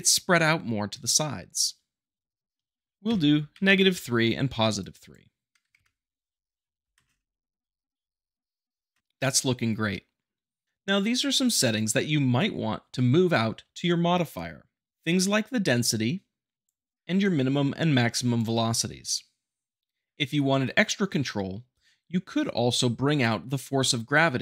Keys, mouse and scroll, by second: 1.2-2.2 shift+drag, 2.8 click, 4.8-5.8 drag, 6.8 shift+Left, 6.9 space, 8.9 space, 10.6 click, 11.3-12.3 middle drag, 14.9 click, 17.2-18.3 drag.